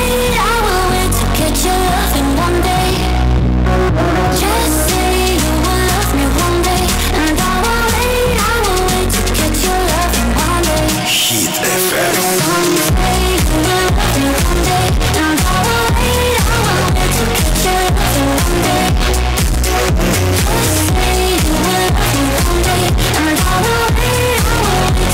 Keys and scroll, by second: 17.9 Tab, 17.9 q, 18.7 Tab.